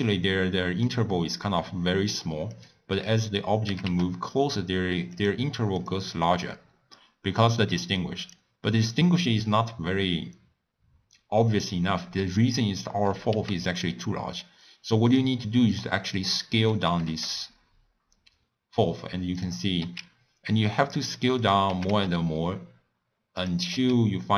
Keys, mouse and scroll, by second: 2.5 click, 3.3 click, 3.7 g, 5.8 click, 6.2-6.8 scroll up 1, 6.8-7.5 scroll down 5, 7.5 scroll up 2, 7.7-8.2 middle drag, 8.2 click, 13.3 s, 15.8-16.8 middle drag, 16.8 g, 19.8 s, 21.7 g, 23.7 s.